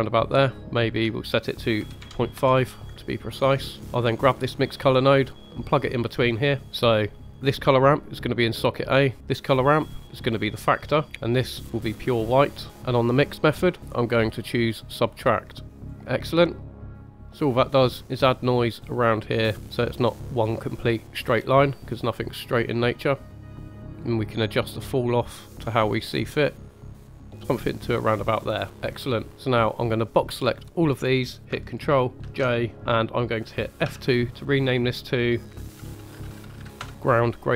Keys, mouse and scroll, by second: 3.0 middle click, 4.2-5.6 drag, 7.1 click, 8.9 middle click, 9.1-10.8 drag, 11.1 click, 15.9 middle click, 16.6 drag, 17.1 click, 19.6-20.0 middle drag, 21.5 middle click, 22.6-23.4 drag, 23.7 click, 24.1 click, 26.3-26.8 drag, 27.0 click, 28.2-28.8 scroll down 4, 28.7 middle click, 29.3 drag, 29.9 click, 32.2 ctrl+j, 33.8 F2.